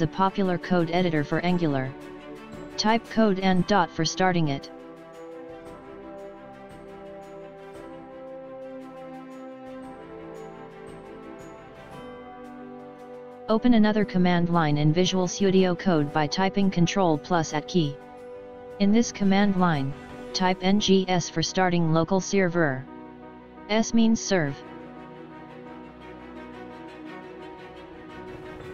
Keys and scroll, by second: 0.7 space, 11.9 ctrl+`, 18.4 ctrl+`.